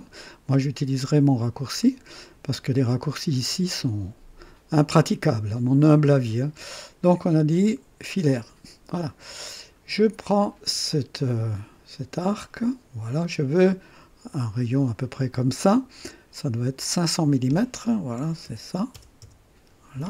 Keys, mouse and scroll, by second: 8.3 click, 9.9 right click, 10.9-12.9 drag, 14.3 click, 16.3 click, 18.1 KP_5, 18.4 KP_0, 18.9 KP_0, 19.2 Return.